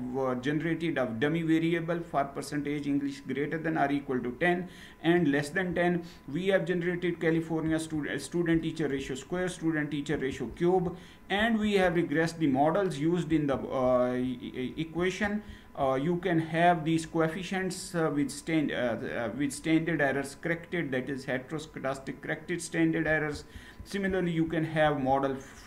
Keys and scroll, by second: 7.3 ctrl+Return, 9.8 ctrl+Return, 11.1 ctrl+Return, 13.0 ctrl+Return, 14.7 ctrl+Return, 23.2 ctrl+Return.